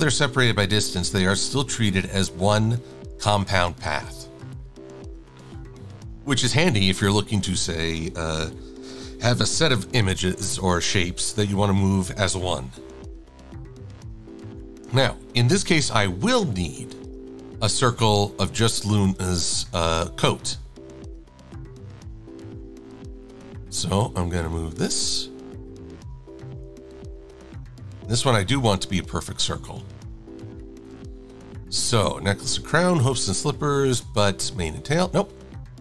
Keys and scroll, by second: 0.9 shift+super+a, 2.5 super+z, 4.8 super+-, 5.0 super+-, 5.2 super+-, 5.4 super+-.